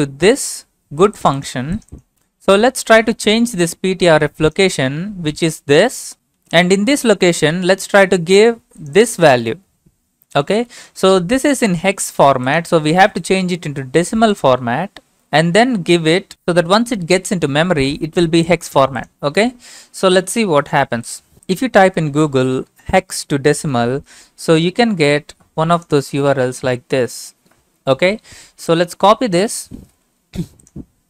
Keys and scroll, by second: 23.3 ctrl+v, 23.7 Return, 29.8 ctrl+c.